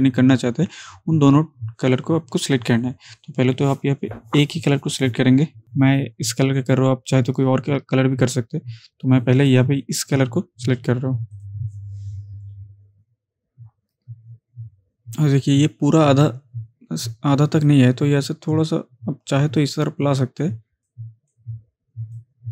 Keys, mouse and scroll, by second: 17.7-19.9 drag.